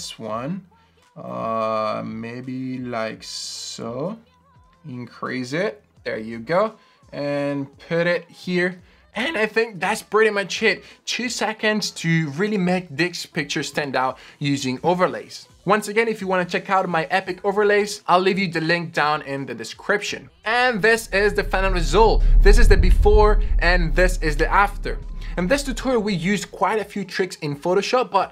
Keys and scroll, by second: 8.3 Return.